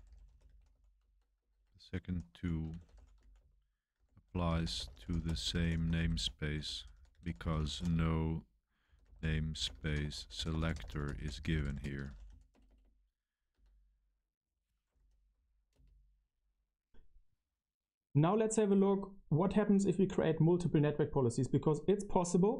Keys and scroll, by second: 0.0-12.4 typing, 12.4 Return, 12.8 Return, 13.5 typing, 14.9 super+1, 15.0 super+1, 15.2 super+1, 15.2 BackSpace, 15.7 space.